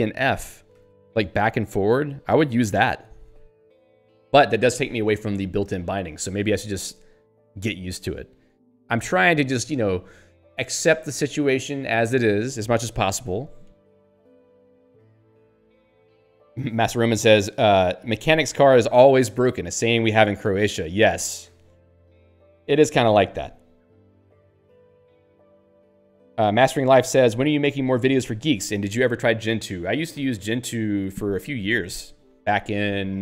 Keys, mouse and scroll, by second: 0.8 ctrl+g, 7.4 Up, 7.7 Down, 8.1 Up.